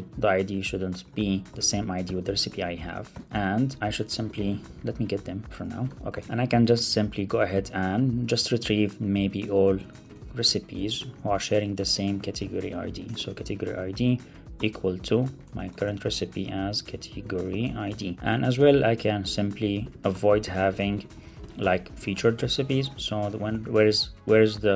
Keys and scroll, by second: 1.3 Right, 1.5 super+v, 2.2 super+Right, 2.8 Return, 5.4 Up, 5.6 super+Right, 5.8 Return, 9.2 Left, 11.7 alt+BackSpace, 13.5 Right, 15.3 Return, 18.1 super+Right, 18.2 Return, 23.3 alt+super+l, 23.4 super+s.